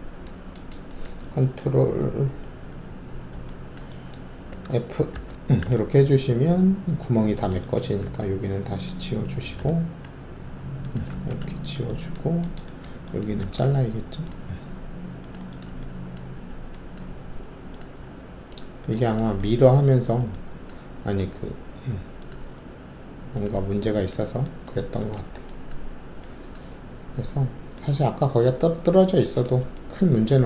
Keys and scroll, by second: 5.1 ctrl+alt+f, 8.0 alt+3, 9.1 ctrl+`, 11.1 ctrl+alt+`, 13.4 alt+s.